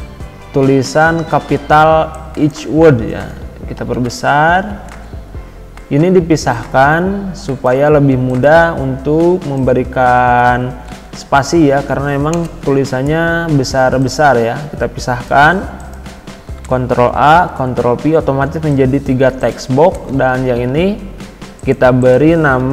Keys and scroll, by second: 12.3 BackSpace.